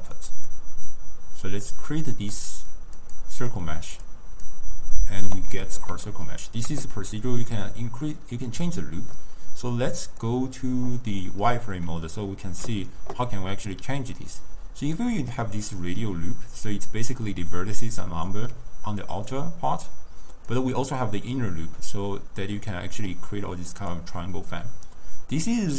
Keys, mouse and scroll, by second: 0.2 click, 0.9-2.1 drag, 2.1-3.1 middle drag, 3.1 click, 3.9-5.7 drag, 5.7-10.1 middle drag, 10.1 click, 11.3-15.1 middle drag, 15.1-18.1 drag, 20.6-23.7 drag, 25.6 click.